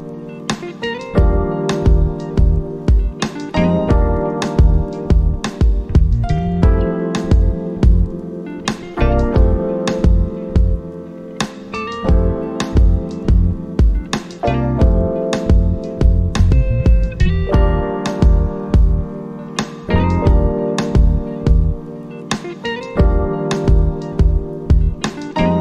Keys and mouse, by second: 0.1 click, 4.1-12.3 drag, 12.5 click, 15.3 click, 15.4-24.8 drag, 24.8-25.6 drag.